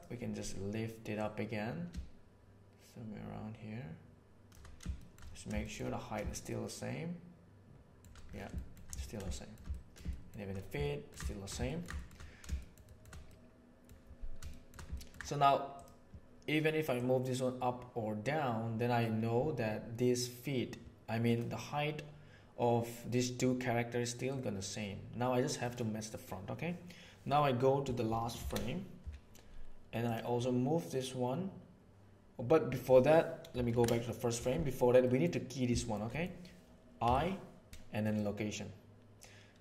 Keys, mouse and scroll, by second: 1.1 right click, 1.3-4.5 middle drag, 5.1 shift+middle drag, 5.6 shift+middle click, 6.3-8.1 shift+middle drag, 9.0 ctrl+middle click, 9.3 shift+middle click, 9.7 ctrl+middle click, 10.1 shift+middle click, 10.9 ctrl+middle click, 11.3 shift+middle click, 11.7 ctrl+middle click, 12.5 shift+middle click, 12.9 shift+middle click, 13.3 middle click, 14.5 shift+middle click, 14.9 ctrl+middle click, 15.7 click, 17.0-20.2 drag, 20.2-21.3 middle drag, 24.3-25.7 drag, 28.4 shift+Right, 35.0-35.3 middle drag, 35.7 shift+middle drag, 36.1 middle click, 37.0 i.